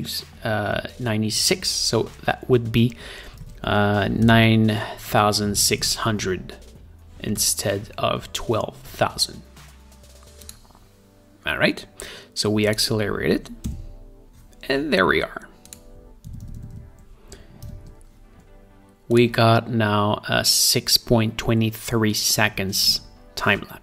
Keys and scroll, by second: 3.9 super+a, 4.7-6.6 typing, 14.1 Return, 18.2 -.